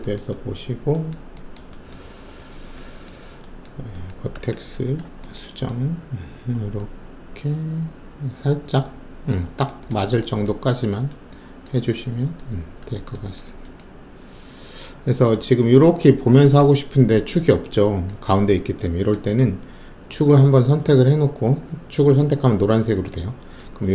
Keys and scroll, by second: 4.3 alt+1.